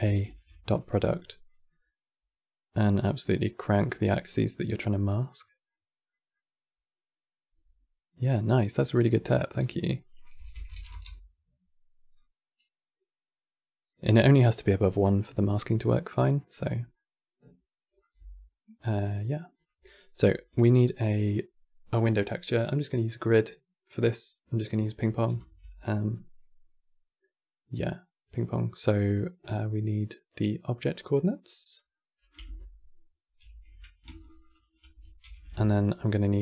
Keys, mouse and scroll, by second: 4.0-4.8 middle drag, 5.4 middle click, 8.8 middle click, 9.3-10.8 drag, 10.8 middle click, 11.4 click, 11.9-13.7 middle drag, 14.3 middle click, 14.7 middle click, 15.3 click, 16.2 middle click, 16.4 scroll down 3, 16.6-17.7 middle drag, 17.7 click, 18.6 click, 20.0-20.4 middle drag, 25.1 shift+a, 31.5 middle click, 32.0 click, 33.1 ctrl+h, 33.8 ctrl+shift+click, 33.9 ctrl+shift+click, 34.1 ctrl+shift+click, 34.2 ctrl+shift+click, 34.9 ctrl+h, 35.9-36.4 middle drag.